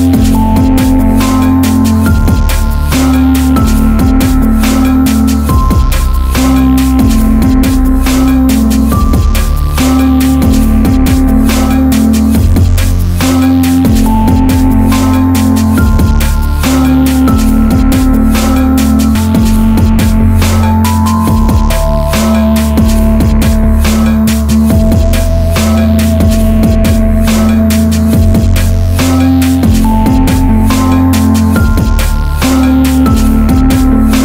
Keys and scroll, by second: 2.2 ctrl+t, 5.2 Up, 5.4 Left, 5.6 Up, 5.9 Left, 6.2 Return, 14.5 ctrl+t, 16.9 Return.